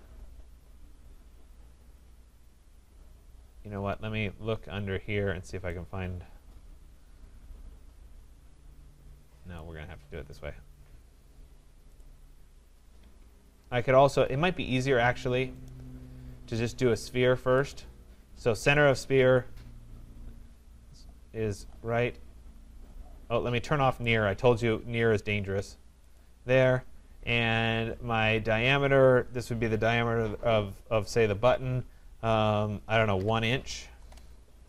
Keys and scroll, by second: 13.2 Escape, 34.0 Return.